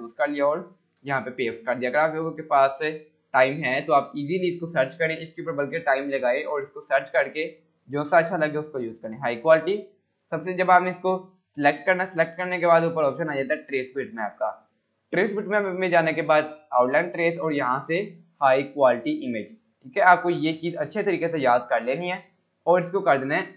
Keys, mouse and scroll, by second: 0.9 ctrl+v, 1.5-2.1 click, 2.5 scroll up 1, 3.8-4.7 drag, 10.3 click.